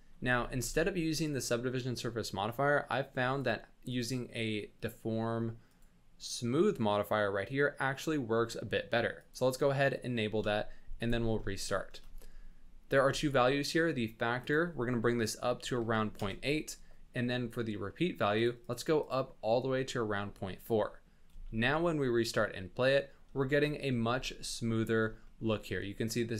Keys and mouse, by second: 0.2 space, 1.4 space, 3.9-9.4 drag, 11.0 click, 11.5 shift+middle click, 12.0 space, 13.0 space, 14.5 click, 18.3 click, 18.6 click, 19.0 click, 20.5 click, 21.3 space, 23.5 shift+middle click, 24.1 space, 25.2 shift+drag.